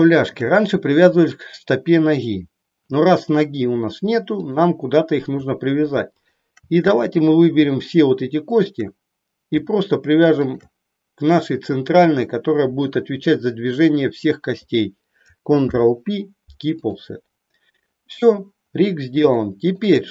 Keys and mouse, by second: 6.1 shift+click, 8.5 shift+click, 15.5 ctrl+p, 19.4 shift+middle click.